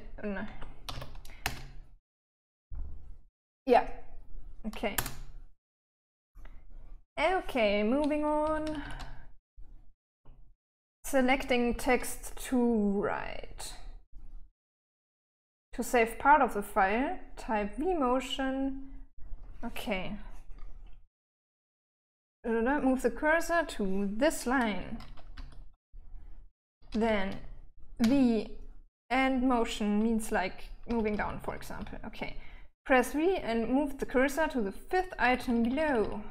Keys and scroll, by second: 0.2-1.9 typing, 1.9 Return, 5.4 Return, 8.8-10.8 typing, 25.5-28.4 typing, 31.3-32.1 typing, 35.7-36.3 typing.